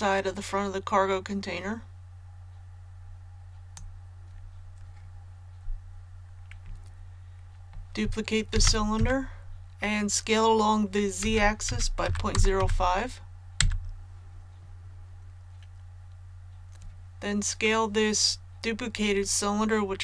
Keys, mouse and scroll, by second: 8.5 shift+d, 11.2-12.5 typing.